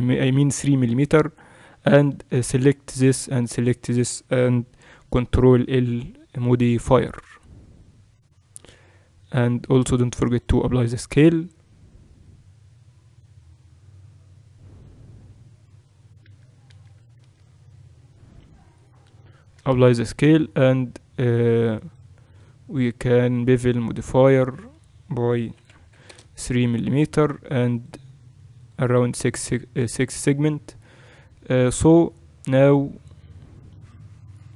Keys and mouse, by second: 1.3-2.5 middle drag, 2.5 click, 3.3-7.7 right drag, 4.8 ctrl+l, 7.7-9.2 middle drag, 9.2-12.5 right drag, 9.8 ctrl+a, 12.5-16.3 middle drag, 16.3 ctrl+z, 16.7 ctrl+z, 18.0 middle click, 18.7-19.7 right drag, 19.7 ctrl+a, 21.9-31.2 drag, 25.8 0, 32.5-34.5 middle drag.